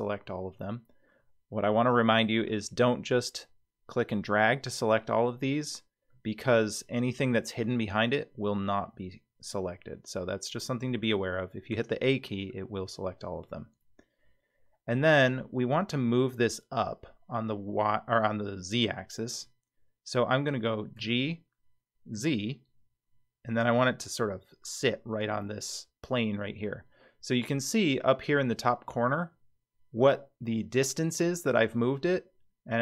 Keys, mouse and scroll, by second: 2.5 click, 3.1-4.3 drag, 6.1-11.0 middle drag, 11.7 a, 12.5-15.0 middle drag, 21.0 g.